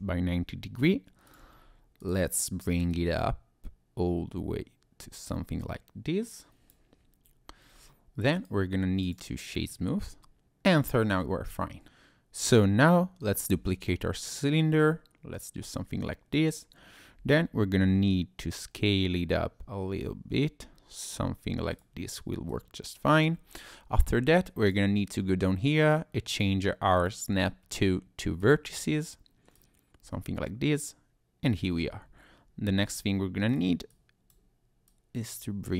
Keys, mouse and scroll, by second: 1.3 ctrl+click, 2.0 click, 2.9 click, 7.7-8.3 scroll up 1, 8.3 right click, 9.7 middle click, 10.4 click, 11.8 ctrl+shift+z, 11.8 click, 13.4 shift+d, 13.8 Escape, 14.6 click, 17.2 s, 21.7 click, 22.5 click, 24.6 click, 27.0 click, 29.5 click, 31.9 Tab, 33.5 click, 33.9 click, 34.9 click.